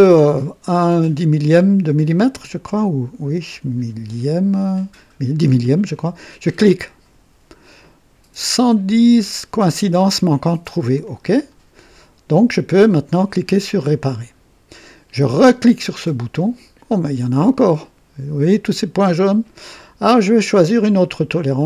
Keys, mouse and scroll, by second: 6.8 click, 11.0 click, 13.7 click, 15.9 click, 21.3 click.